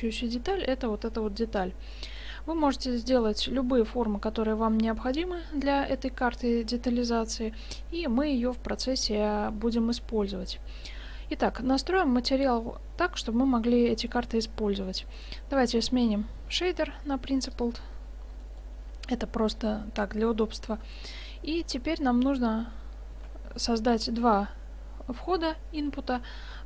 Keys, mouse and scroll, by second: 14.5-15.2 middle drag, 15.2 right click, 15.4 click, 15.7 shift+s, 16.0-16.8 right drag, 18.4 middle click, 21.7-22.8 middle drag, 23.2 shift+a.